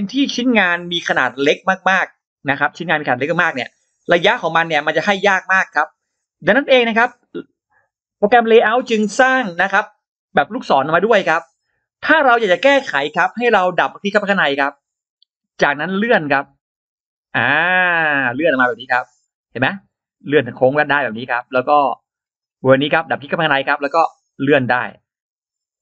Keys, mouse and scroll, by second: 1.8-2.8 drag, 3.7 shift+right click, 3.9 shift+right click, 4.5 scroll down 2, 5.3 scroll down 2, 5.9-7.0 scroll up 4, 14.3 click, 14.6 click, 15.4-18.0 drag, 18.2-18.5 scroll down 2, 18.6-18.9 scroll up 2, 20.8-21.1 scroll down 2, 21.6-21.9 scroll down 2, 22.0 scroll up 2, 22.9 click, 23.2 click, 23.7-25.8 drag.